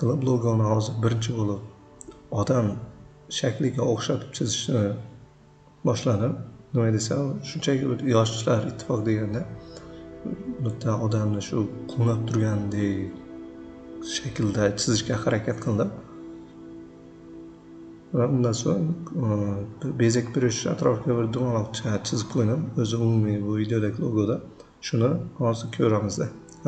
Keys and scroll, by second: 1.6 c, 3.2 v, 4.0 p, 11.5 c, 16.4 p, 18.8 shift+c.